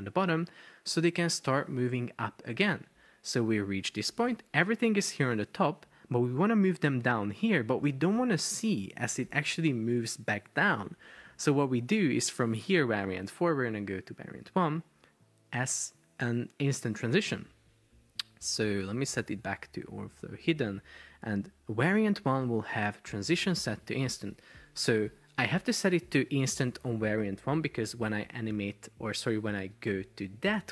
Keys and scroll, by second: 1.0 space, 2.3 Escape, 4.2 shift+super+4, 6.4 space, 7.7 Escape, 9.3 super+p, 10.9 Escape.